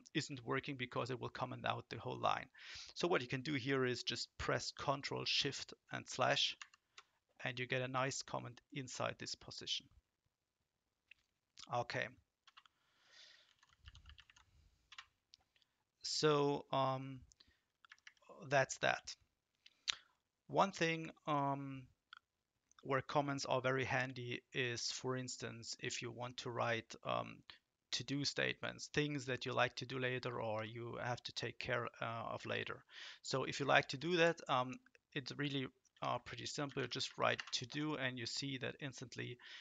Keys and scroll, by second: 6.6 ctrl+shift+?, 12.4-14.9 typing, 17.9 Up, 18.0 Up, 18.4 Up, 18.8 Right, 30.5 shift+Down, 32.4 Delete, 33.7 Right, 33.9 Right, 34.1 Right, 36.0-37.6 typing.